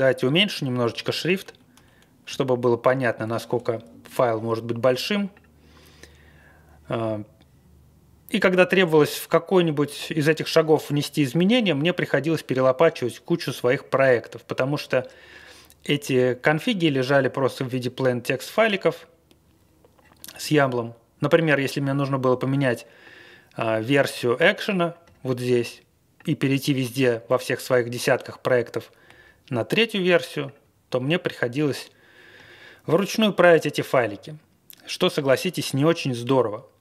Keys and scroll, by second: 0.5 super+-, 0.8 super+-.